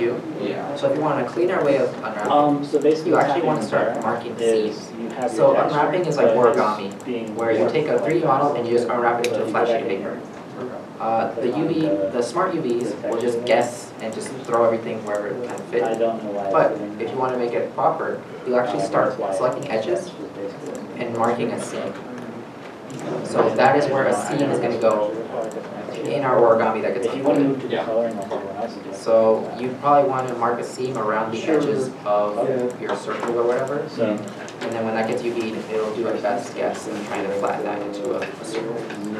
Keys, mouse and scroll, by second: 1.7 shift+middle click, 3.3 middle click, 20.3 middle click, 20.7 ctrl+e, 22.7 ctrl+e, 22.7 middle click, 28.2 middle click, 28.4 ctrl+z.